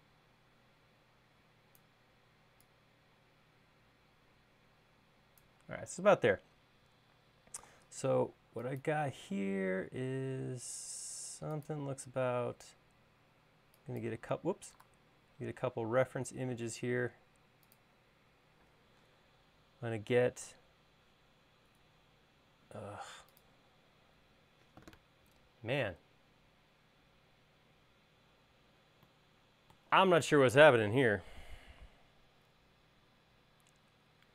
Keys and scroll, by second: 6.9 l, 10.4 l, 15.8 super+z.